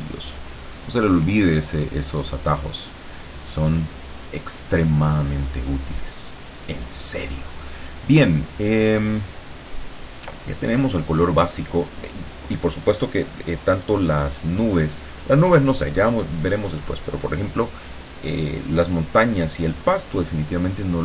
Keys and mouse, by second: 0.3 click.